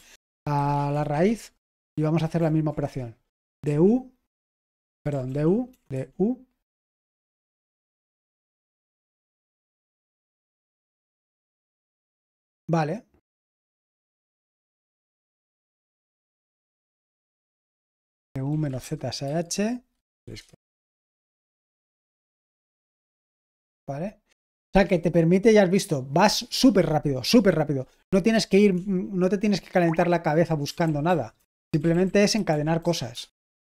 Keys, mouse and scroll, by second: 0.3-1.4 typing, 1.9 ctrl+p, 2.3 ctrl+p, 2.8 Return, 3.1-5.9 typing, 8.6 ctrl+j, 8.9 Return, 11.1 ctrl+p, 17.4 ctrl+c, 17.6-20.1 typing, 20.4 Return, 21.4 ctrl+c, 28.7-33.6 typing.